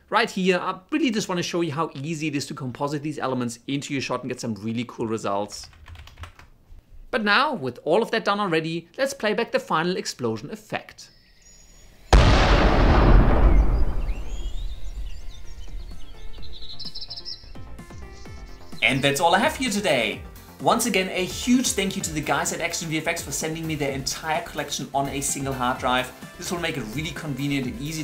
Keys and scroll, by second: 0.3 p, 3.2-4.7 typing, 5.2 F4, 5.8 s, 6.1 Return, 10.7 space.